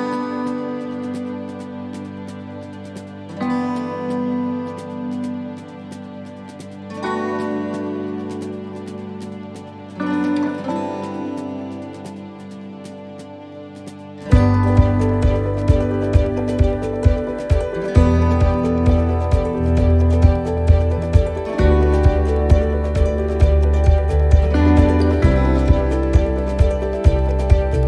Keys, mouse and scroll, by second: 0.3 right click, 1.5 click, 4.3 right click, 5.2 click, 7.4 right click, 8.3 shift+right click, 10.4 shift+right click, 11.4 shift+right click, 11.4 click, 17.5 middle click, 17.5 s, 18.7 middle click, 18.7 scroll down 1, 19.1 shift+middle click, 19.1 shift+middle click, 19.7 middle click, 21.4-21.7 scroll up 2, 21.8 shift+middle click, 23.0 ctrl+r, 24.8 ctrl+r, 25.3 right click, 26.1 shift+right click, 26.9 click.